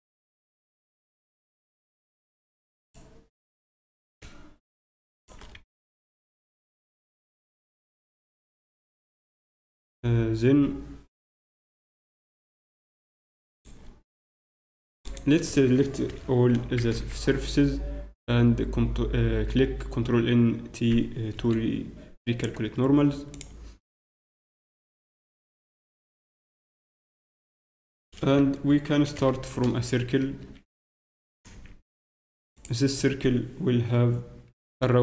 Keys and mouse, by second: 1.6 a, 1.6 b, 3.7 g, 5.5 z, 6.1 z, 6.3 z, 7.2 z, 7.8 Tab, 12.1 z, 13.5-14.9 drag, 14.1 Tab, 14.9 Tab, 15.5 Tab, 16.1 a, 16.7 a, 16.9 ctrl+n, 17.2 Tab, 19.8 Tab, 23.3-25.2 drag, 25.2 middle click, 28.7 Tab, 34.5 shift+F6.